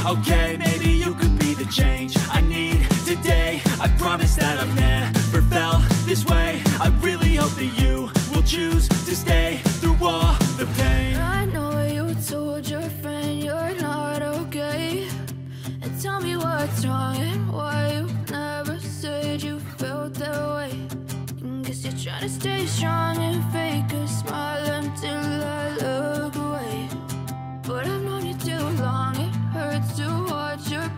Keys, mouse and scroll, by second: 0.4-2.7 drag, 2.7 space, 8.7 space, 9.7-10.9 drag, 10.9 scroll up 1, 12.4 click, 14.0 space, 16.4-18.5 typing, 19.3-21.7 scroll down 1, 21.7-27.3 drag, 28.6-30.9 drag.